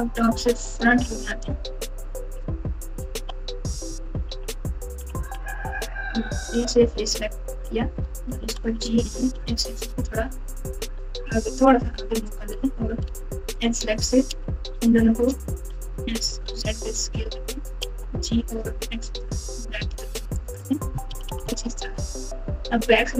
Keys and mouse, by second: 0.0 KP_1, 0.8 KP_3, 2.1-5.1 typing, 6.5 3, 7.5 click, 8.3 g, 13.0 2, 15.8 s, 17.8 g, 21.0 KP_6, 21.2 KP_6.